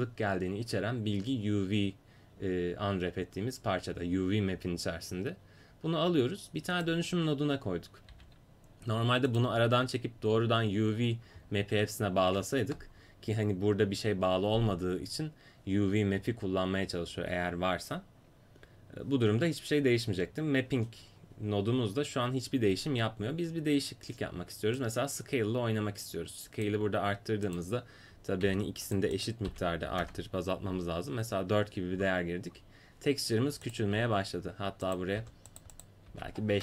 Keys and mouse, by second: 6.8-9.3 drag, 8.1 g, 24.8-26.3 drag, 27.5-32.0 drag, 33.7-35.6 drag, 34.0 5.